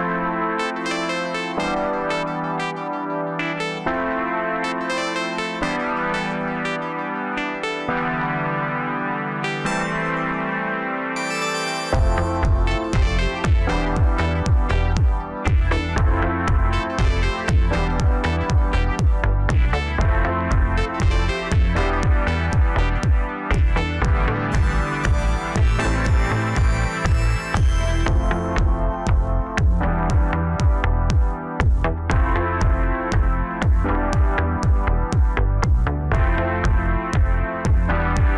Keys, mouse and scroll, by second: 1.8 s, 3.2 g, 5.2 g, 7.1 scroll up 1, 7.4 scroll down 3, 7.7 middle click, 8.5-9.4 scroll up 1, 9.4 e, 11.7-12.4 scroll up 2, 12.4 Tab, 12.8-13.9 scroll down 3, 13.9 ctrl+a, 15.3-16.2 scroll up 2, 16.2 KP_1, 16.9-17.6 scroll up 1, 17.6 Tab, 18.6 click, 19.9 i, 22.3-22.7 scroll up 1, 22.7-23.1 scroll down 4, 23.1 middle click, 23.7-25.0 scroll up 2, 25.0 ctrl+r, 28.4 ctrl+r, 31.9 shift+click, 32.1 shift+click, 33.5 KP_1, 34.2-34.8 scroll up 1, 34.8-35.6 ctrl+KP_8, 36.3-36.8 scroll up 3, 37.4 ctrl+b.